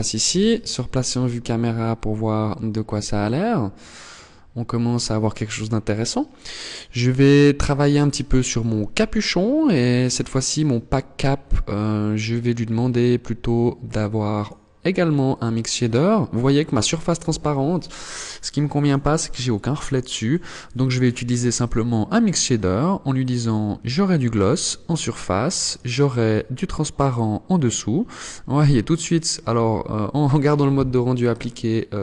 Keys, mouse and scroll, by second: 0.3 scroll down 1, 0.9 scroll down 2, 6.0 right click, 6.8 right click, 8.4 click, 9.2 click, 13.1 click, 19.4 click, 22.2 click, 24.8 click, 28.9 scroll up 2, 29.7 scroll up 1, 30.8 shift+middle click.